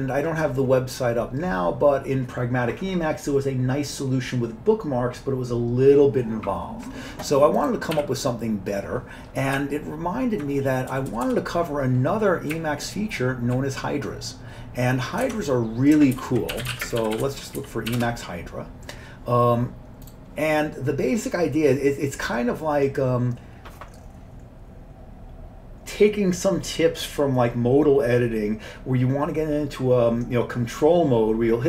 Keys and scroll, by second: 8.0 q, 9.6 Up, 10.1 Up, 10.3 Up, 11.0 Page_Up, 11.1 Page_Up, 11.3 Page_Up, 12.6 Up, 13.1 Up, 13.1 Up, 13.3 Up, 13.4 Up, 15.3 alt+Tab, 16.2 ctrl+t, 16.3-18.4 typing.